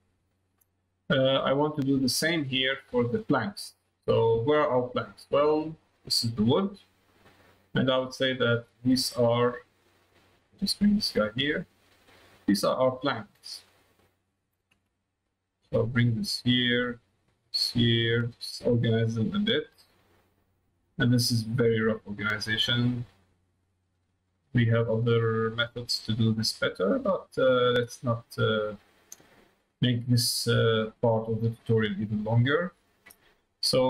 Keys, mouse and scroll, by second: 1.3 click, 2.9 click, 4.1 middle click, 5.0 middle click, 5.9 click, 7.4-8.4 drag, 8.9 click, 10.4 click, 12.0 click, 13.3 middle click, 14.4 click, 16.8 click, 18.3 click, 19.9 click, 21.0-22.1 drag, 22.6 click, 23.5 click, 25.2-26.5 drag, 27.6-28.8 drag, 29.7-31.4 drag, 31.7 middle click, 33.7 middle click.